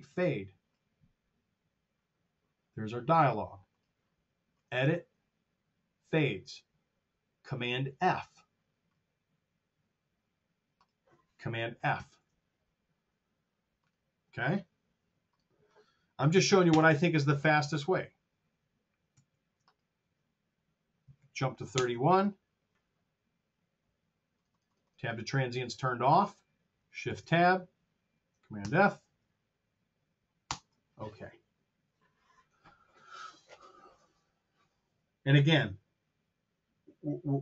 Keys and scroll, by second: 12.6 super+f, 16.2 KP_2, 16.5 Return, 19.1 super+z, 21.0 KP_3, 21.6 Home, 26.9 shift+End, 28.5 super+f, 30.4 Return.